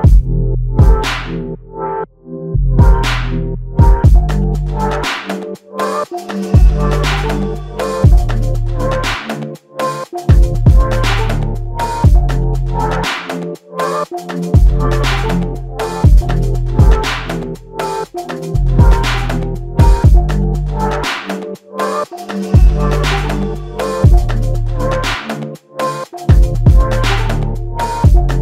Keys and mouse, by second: 1.1 alt+click, 2.7 f, 4.0 alt+click, 7.1 double click, 9.6 alt+click, 11.3 double click, 14.0 alt+click, 15.8 double click, 18.5 alt+click, 20.0 r, 25.1 shift+click.